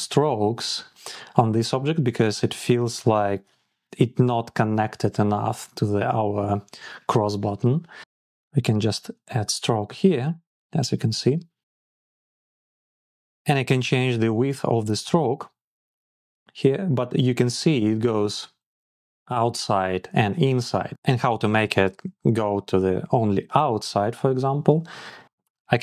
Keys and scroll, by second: 15.4 Down, 16.1 Down, 17.1 Up, 17.4 Down.